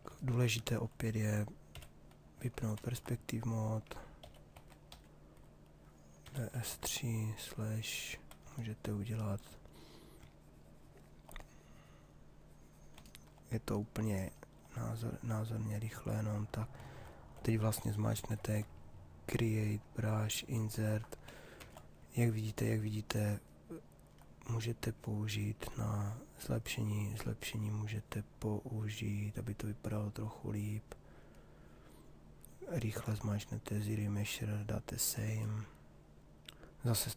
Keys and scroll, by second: 1.2 p, 4.0-7.2 typing, 21.1 shift+f.